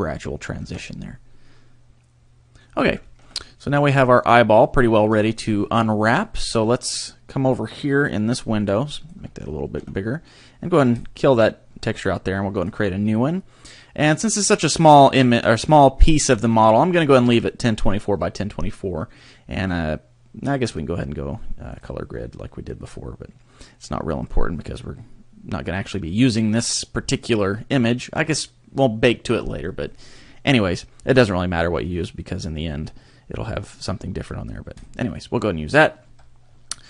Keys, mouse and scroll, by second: 0.7 Tab, 0.8 scroll down 3, 1.1 middle click, 2.7-3.1 scroll down 2, 3.1 shift+middle click, 3.3 middle click, 8.1 click, 9.3 shift+middle click, 10.9 click, 12.7 click.